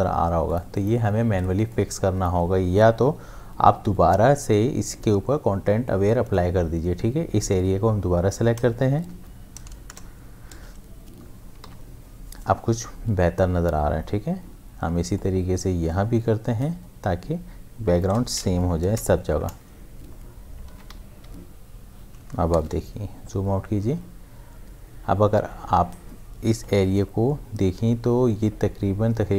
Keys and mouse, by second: 0.0 space, 0.5 ctrl+click, 1.5 space, 1.7 click, 2.0 space, 2.3 space, 3.8 m, 6.3-9.1 drag, 9.1 shift+F5, 9.9 Return, 11.8 ctrl+d, 14.4 m, 15.1-18.5 drag, 18.5 shift+F5, 18.9 Return, 20.8 ctrl+d, 21.2 v.